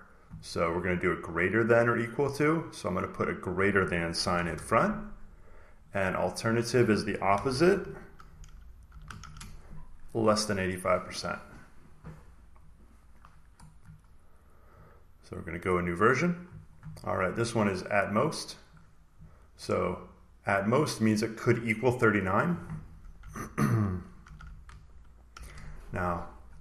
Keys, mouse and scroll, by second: 0.9 click, 1.4 click, 2.5 click, 3.4 click, 4.3 Right, 5.8 click, 5.8-6.3 typing, 7.4-9.6 typing, 7.5-8.8 drag, 10.9 click, 12.6 click, 13.2 click, 14.1 middle click, 14.7 middle click, 14.7-15.1 scroll down 1, 15.1-17.2 drag, 18.6 click, 21.5 click, 22.2 click, 23.1-25.2 typing.